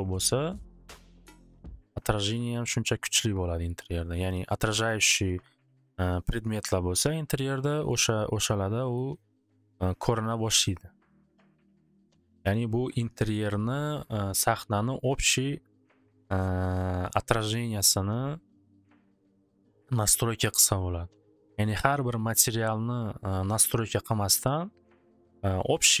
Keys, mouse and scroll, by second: 4.4-5.1 typing, 8.2-9.5 middle drag, 11.8 middle click, 13.9-16.9 middle drag.